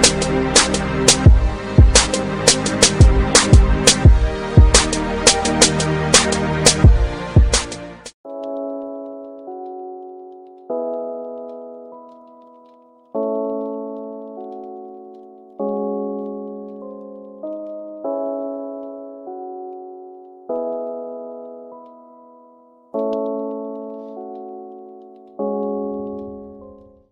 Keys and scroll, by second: 0.9 ctrl+d.